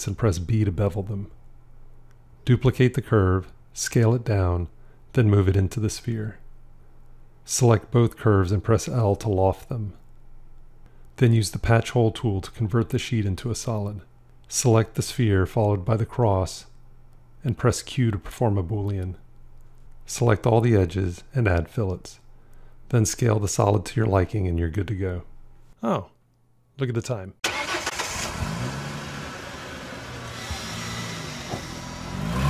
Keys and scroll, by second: 2.7 shift+d, 8.6 l, 15.6 q.